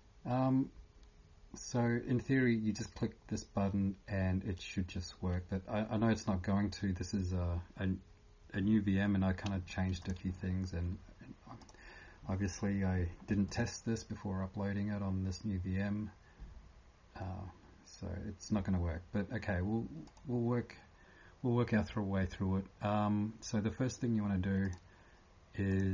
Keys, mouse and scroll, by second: 10.0 click, 20.1 click.